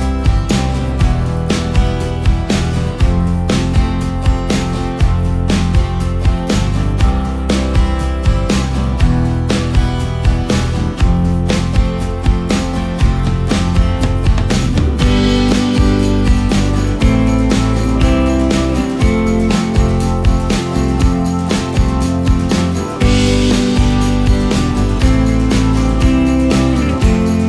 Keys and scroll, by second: 1.7 ctrl+space, 2.3 ctrl+space, 3.1 ctrl+space, 10.4 ctrl+space, 14.0 ctrl+shift+space, 16.0 ctrl+shift+space, 18.7 ctrl+shift+space, 20.2 ctrl+space, 22.1 i.